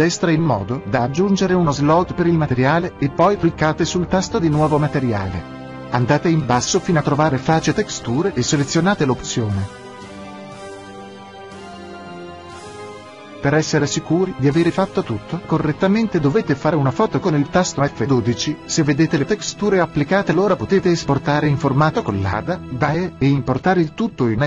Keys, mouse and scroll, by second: 1.4-3.2 drag, 3.3-5.2 drag, 5.3-7.1 drag, 7.5-9.4 drag, 10.9-12.8 drag, 22.2-24.2 drag.